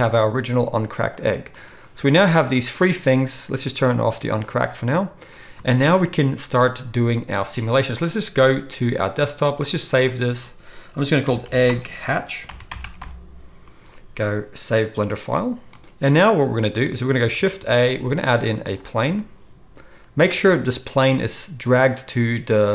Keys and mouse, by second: 1.1 click, 1.5 click, 4.4 click, 5.8 ctrl+s, 6.1-20.2 ctrl+middle drag, 17.5 shift+a, 20.2-22.7 drag.